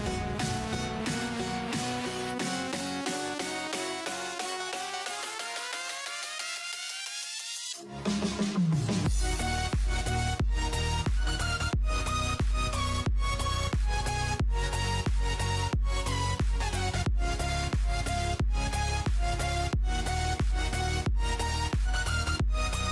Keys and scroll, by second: 9.3-14.2 typing.